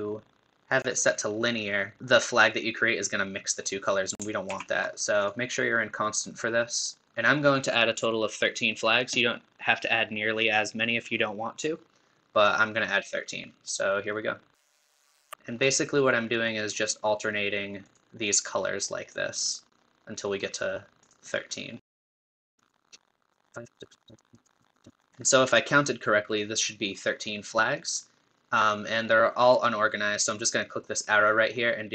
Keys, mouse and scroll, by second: 4.5 ctrl+z, 5.2-22.1 drag, 22.6-25.1 drag, 30.8-31.9 drag.